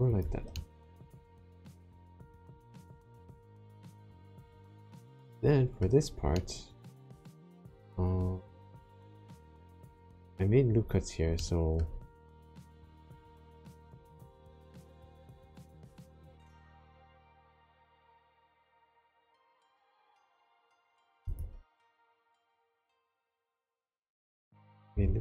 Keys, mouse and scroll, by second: 0.1 click, 0.5 middle click, 6.3 shift+middle click, 7.3 middle click, 8.1-8.5 scroll up 3, 8.8 shift+middle click, 11.4 shift+middle click, 12.0 middle click, 12.9-14.1 scroll down 3, 14.3 ctrl+r, 21.3-22.5 scroll up 1, 22.5 right click, 23.2 click, 24.9 ctrl+r.